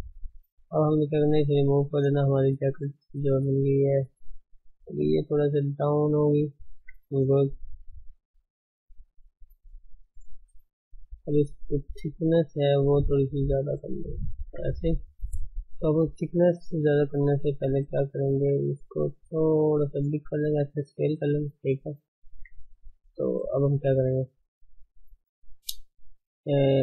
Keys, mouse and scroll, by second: 0.8-1.9 right drag, 1.9-2.3 scroll up 2, 2.3-2.7 shift+middle drag, 2.7 scroll up 1, 2.8 shift+middle click, 3.5 Tab, 3.9 click, 5.0 g, 6.7 Tab, 7.3 shift+middle click, 8.0 shift+z, 9.8-11.0 scroll up 5, 10.2 shift+middle drag, 10.7 shift+middle click, 11.0 Tab, 11.5 click, 12.1 g, 13.6 click, 13.9 click, 14.2 g, 14.7 Tab, 15.0-15.9 scroll down 9, 15.4 Tab, 15.9 shift+middle click, 16.3 middle click, 16.6 shift+middle click, 17.0 scroll up 3, 17.2 middle click, 18.0 a, 18.7 s, 20.4-22.1 middle drag, 22.2 middle drag, 22.4 Tab, 22.7-23.0 middle drag, 23.0 ctrl+s, 23.2-24.0 middle drag, 24.0-25.2 scroll up 1, 25.2-26.8 scroll up 1.